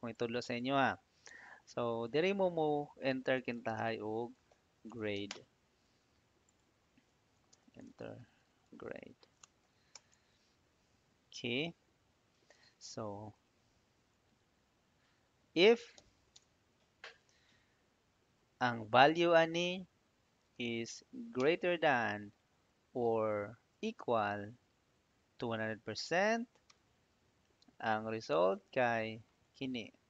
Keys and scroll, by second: 2.4-5.5 typing, 5.8 Tab, 6.8-10.0 typing, 10.2 Tab, 13.2 =, 15.6-16.4 typing, 21.2 shift+., 26.5 '.